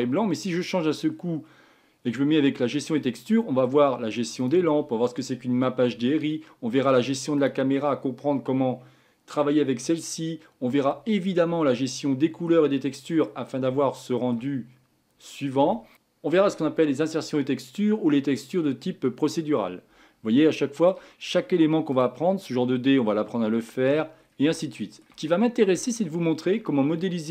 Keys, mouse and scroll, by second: 0.8 click, 1.2-2.2 scroll down 8, 2.2-4.4 middle drag, 4.4 click, 6.3-7.4 middle drag, 7.4 click, 11.7-12.8 shift+middle drag, 12.8-13.7 scroll up 4, 13.7 scroll up 2, 13.8-14.8 shift+middle drag, 14.8-15.8 scroll up 8, 15.8 shift+middle drag, 20.5-21.2 shift+middle drag, 21.2-21.9 scroll up 4, 21.9 click, 23.1-24.2 scroll down 10, 24.2-24.7 scroll down 4, 24.7-25.4 shift+middle drag, 25.4-25.9 scroll down 5, 25.9-27.0 shift+middle drag, 27.0 scroll up 1, 27.0-27.3 middle drag.